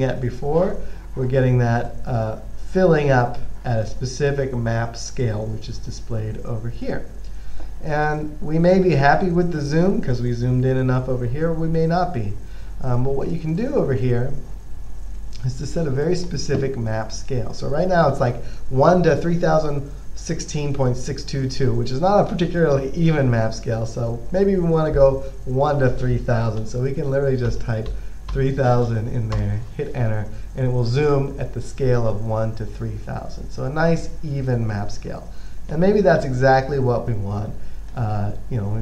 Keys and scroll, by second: 27.0-28.6 typing, 29.6 Return, 33.8 typing.